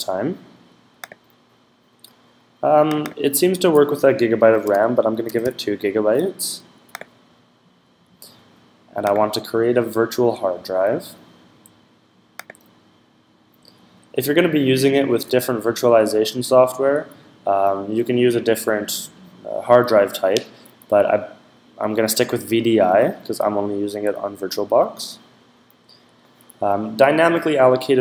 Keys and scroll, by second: 4.1-5.7 typing.